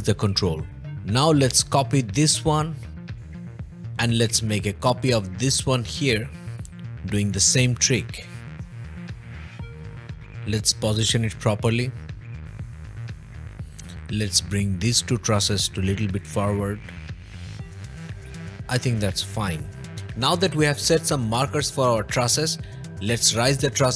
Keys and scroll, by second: 3.8 h, 4.9 m, 10.1 m, 14.0 m, 19.3 o.